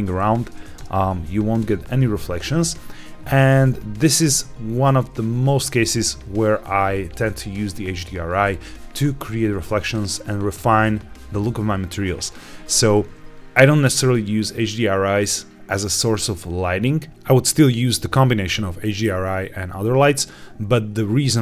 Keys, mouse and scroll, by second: 0.7 KP_0, 2.8-3.7 scroll up 2, 4.0 scroll down 1, 5.3 shift+middle click.